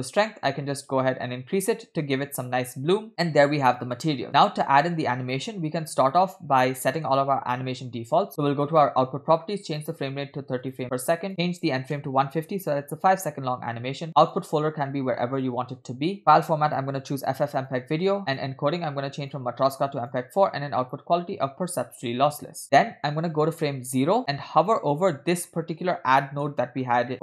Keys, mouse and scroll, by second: 0.0-2.9 drag, 3.1 middle click, 4.7 click, 6.7 scroll down 2, 6.8 middle click, 8.7 click, 9.7-10.8 drag, 11.3-12.8 drag, 14.3-16.0 drag, 15.7 /, 16.3-16.7 scroll down 2, 16.7-17.9 drag, 18.3 click, 19.3-20.3 drag, 20.9-22.2 drag, 23.6-24.2 drag, 24.2-24.6 scroll down 4, 24.7 middle click, 26.0-27.1 scroll up 6, 26.3 middle click, 27.1 middle click.